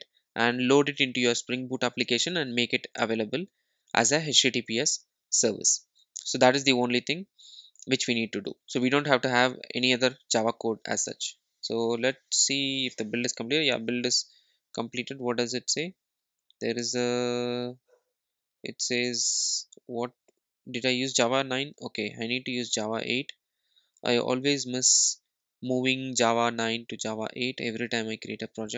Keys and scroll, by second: 24.7 ctrl+alt+super+;.